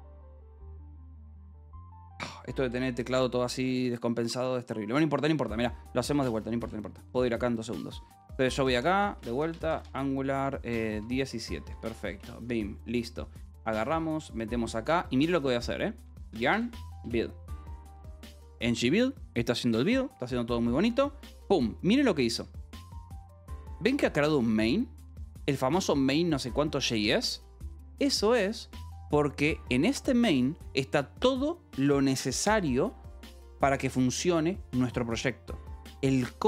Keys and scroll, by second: 0.6 alt+o, 1.7 Escape, 6.9-12.3 typing, 13.6 w, 15.7-17.4 typing.